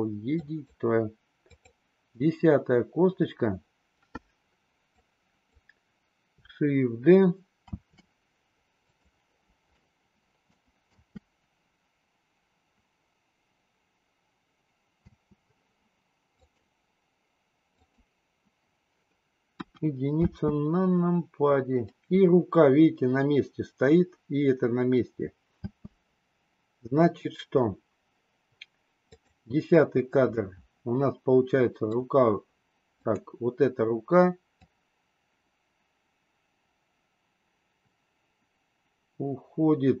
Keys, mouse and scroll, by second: 0.5 click, 1.5 click, 4.9-5.4 drag, 7.7 shift+d, 9.7-10.4 middle drag, 10.8 space, 15.0 space, 16.3 click, 17.6 click, 19.5 KP_1, 20.2 space, 25.6 space, 29.0 click, 30.3-31.9 middle drag, 32.9 click, 34.7-40.0 drag.